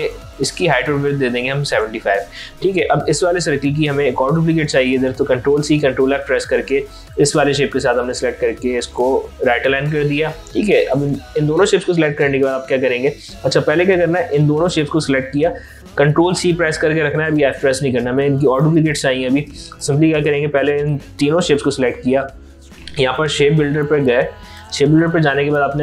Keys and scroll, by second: 0.4 ctrl+a, 5.1 ctrl+c, 5.8 ctrl+f, 16.0 ctrl+c.